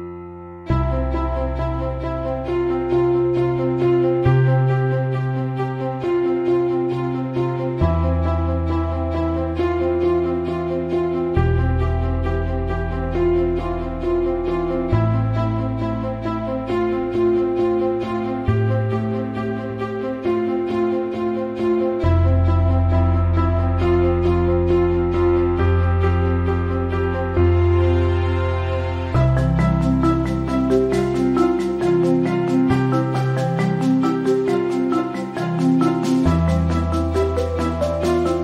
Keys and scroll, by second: 6.5 b, 17.3-17.9 typing.